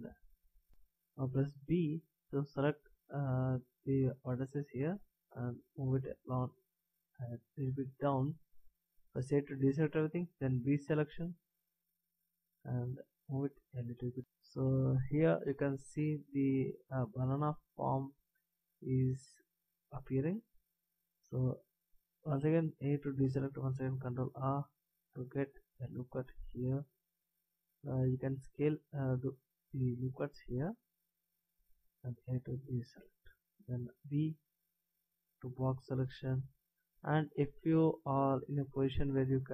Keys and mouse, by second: 0.7 ctrl+z, 0.7 a, 1.6 b, 4.8-7.9 drag, 9.2 a, 10.6 b, 13.2-14.2 drag, 22.2 a, 24.0 ctrl+r, 27.0 s, 32.1 a, 33.9 b.